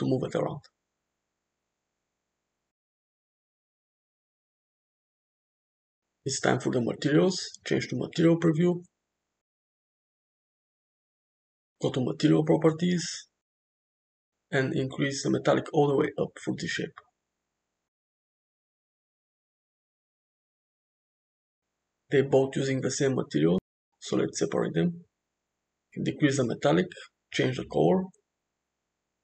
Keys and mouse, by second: 0.3 g, 3.5 g, 8.4 click, 9.1 click, 10.9 click, 13.3 click, 15.3 click, 19.9 click, 20.9 click, 24.2 click, 26.3 click, 27.6 click.